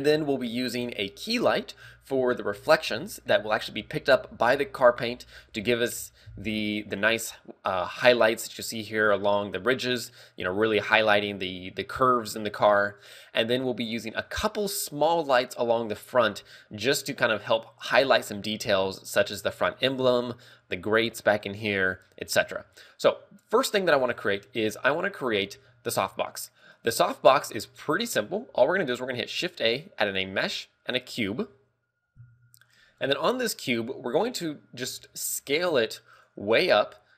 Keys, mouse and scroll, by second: 33.4 scroll down 2, 33.5-34.4 scroll down 4, 34.4 KP_1, 34.6 KP_1, 34.8 scroll down 2, 35.4 z, 35.8 s.